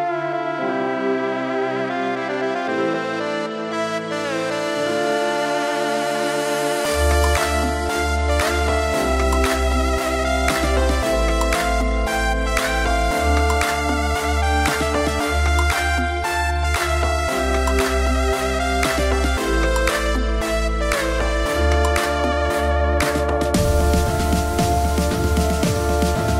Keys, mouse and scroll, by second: 0.5 click, 1.3 click, 1.7 click, 2.3-4.7 drag, 7.4 click, 7.6 click, 8.7 click, 9.7 r, 10.4 z, 13.2 ctrl+click, 14.4 click, 15.2 Tab, 15.9-17.8 drag, 19.1-21.3 drag, 23.6 click.